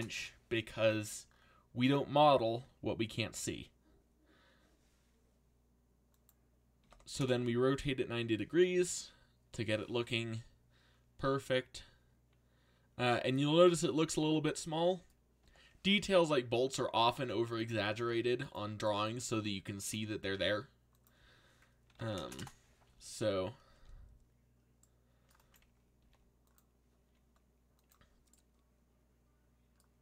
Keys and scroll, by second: 0.0-0.2 typing, 6.5-7.4 typing, 16.7-19.9 typing, 21.6-23.7 typing, 26.0 x.